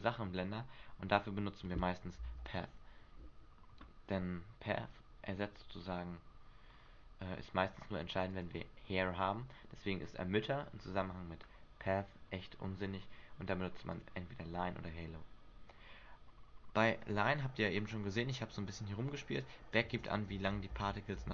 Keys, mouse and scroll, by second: 2.4 alt+a, 3.4 Escape, 6.9-8.5 scroll up 8, 8.5 click, 10.8-12.8 scroll down 7, 14.1 click, 19.6 click, 20.9 alt+a.